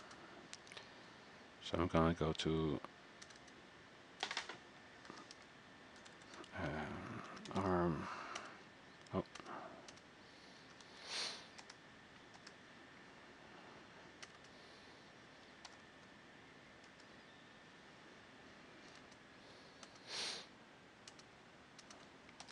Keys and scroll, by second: 5.1-6.2 typing, 9.6-11.5 typing, 11.8 Return, 12.5 Return, 15.6-17.4 typing, 17.1 Return, 18.8 typing.